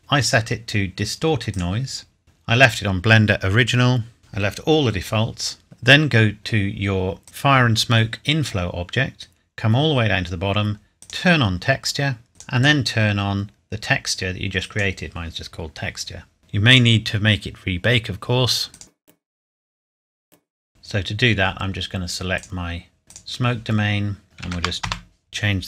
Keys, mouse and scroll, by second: 0.2 click, 5.6 scroll up 1, 9.1 scroll down 1, 11.0 click, 14.6 click, 20.3 click, 22.4 click, 24.4 KP_7, 24.6 KP_0, 24.8 KP_Enter.